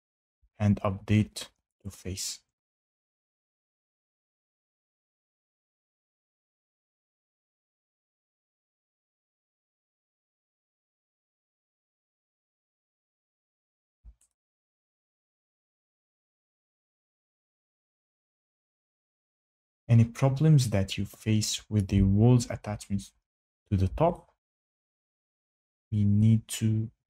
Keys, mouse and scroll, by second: 0.2 shift+middle click, 1.8 click, 6.2 click, 12.5 click, 21.7 shift+right click, 22.6 Escape, 25.3 Escape, 25.3 click.